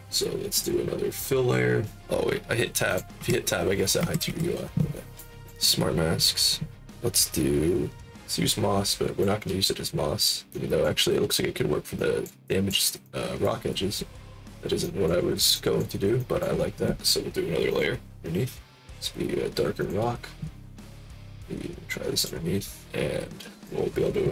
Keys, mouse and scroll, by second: 0.5 click, 2.8 click, 3.1 Tab, 3.9 Tab, 4.2 Tab, 5.1 click, 5.3 click, 8.0-9.1 drag, 10.5 alt+click, 11.1 middle click, 11.9 alt+click, 12.4 alt+click, 13.0 alt+click, 15.5 alt+click, 16.1 alt+click, 17.6 click, 19.7 click, 20.8 alt+click, 21.3 click, 23.5 click.